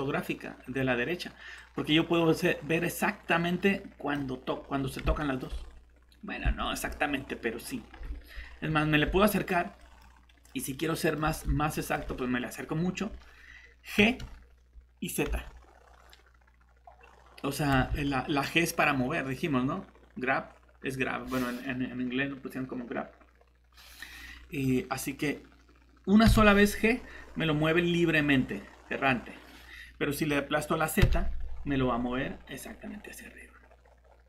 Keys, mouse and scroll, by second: 4.6-5.0 scroll up 1, 5.2 middle click, 5.5 scroll up 1, 6.6 middle click, 6.8-7.6 scroll up 1, 7.6-8.0 scroll down 1, 8.4 scroll up 1, 9.2 middle click, 9.6 typing, 11.2 scroll up 1, 11.2 typing, 11.7 middle click, 11.9 scroll up 1, 14.0 g, 15.2 z, 17.7 Escape, 26.2 g, 31.0 z.